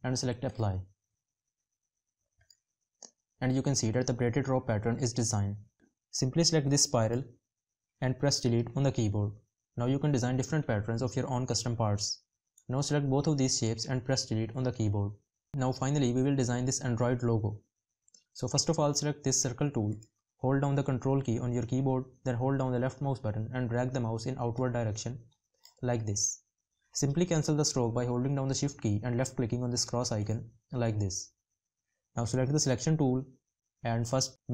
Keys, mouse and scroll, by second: 20.3 ctrl+click, 28.1 shift+click.